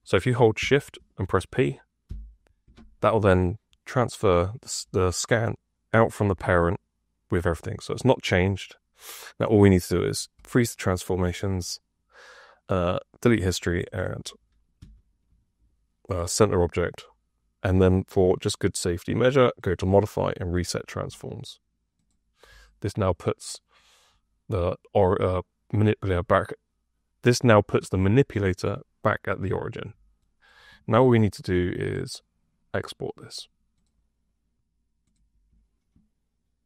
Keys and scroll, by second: 2.0 shift+p, 14.7 w.